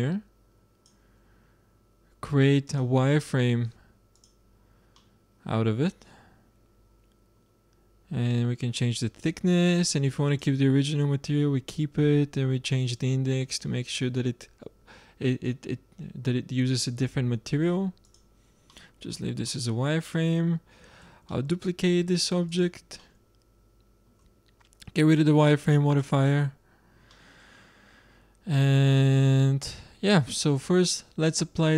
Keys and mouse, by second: 1.5 middle drag, 2.6-4.5 drag, 4.8-6.0 middle drag, 8.2-10.0 drag, 10.2-12.0 drag, 12.7-14.5 drag, 18.0-19.9 drag, 21.0 shift+d, 25.8-27.6 drag, 28.8-31.7 middle drag.